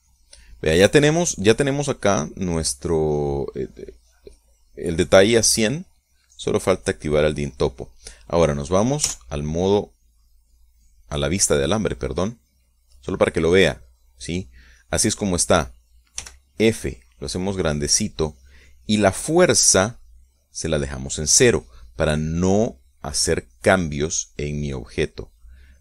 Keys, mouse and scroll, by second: 0.7 click, 7.6 click, 10.6 z, 11.4-17.2 middle drag, 17.7 f, 19.0 click, 21.6-23.0 drag.